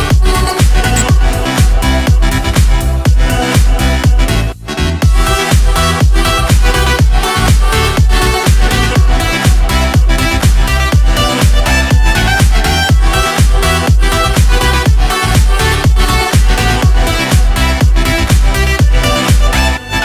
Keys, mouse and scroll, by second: 0.9 click, 2.4 click, 3.2 click, 3.9 scroll down 1, 4.2-4.6 scroll up 2, 5.6 click, 6.8 click, 8.2 click, 8.6 click, 9.2 click, 9.9 click, 11.3-12.9 drag, 13.4-14.0 ctrl+scroll down 4, 14.5 click, 15.2 ctrl+scroll up 2, 16.1 click, 18.6 click, 19.3 click.